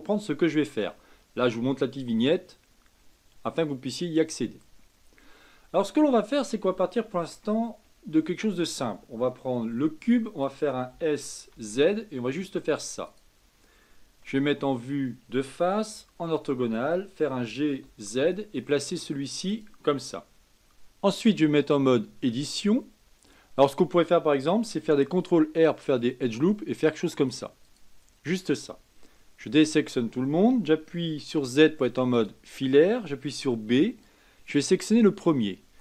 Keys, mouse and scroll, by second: 5.9-10.9 middle drag, 10.9 s, 14.2 KP_1, 15.9 KP_5, 17.2 g, 20.5-22.1 shift+middle drag, 22.1 Tab, 25.0 ctrl+r, 29.4 a, 31.3 z, 33.4 b.